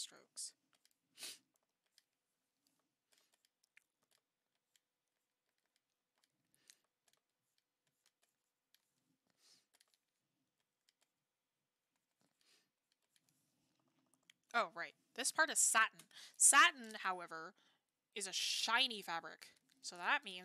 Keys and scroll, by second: 0.1 ctrl+z, 13.8 ctrl+z.